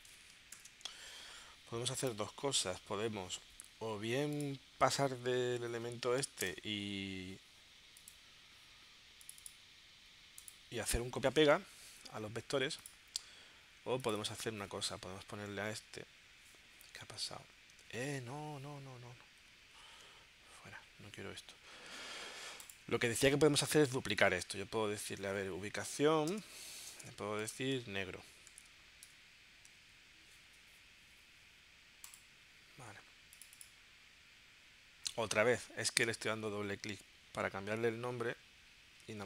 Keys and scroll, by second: 0.5 shift+super+p, 6.4 BackSpace, 15.0 Right, 17.9 super+Tab, 19.4 super+q, 26.3 space, 26.9 space, 27.4 shift+n, 28.6 n, 29.0 BackSpace, 29.7 e, 35.3 super+Tab, 36.5 super+q.